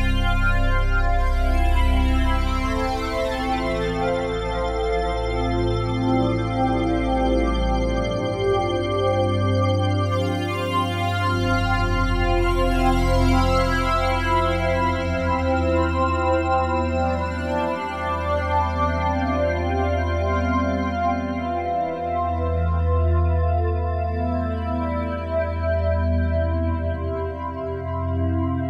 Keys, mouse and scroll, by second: 0.6 click, 2.1 ctrl+alt+click, 3.1-5.6 drag, 6.5 shift+click, 7.3 shift+click, 10.4 Tab, 11.1 click, 12.2-12.7 typing, 14.0-21.0 drag, 22.4 ctrl+s, 23.4-26.3 ctrl+alt+drag.